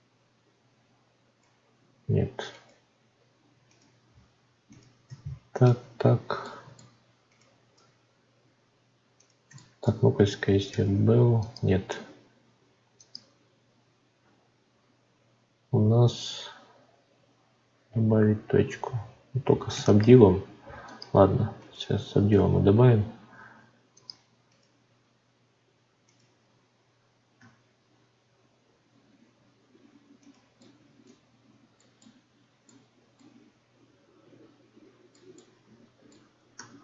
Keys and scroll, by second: 10.7 ctrl+b.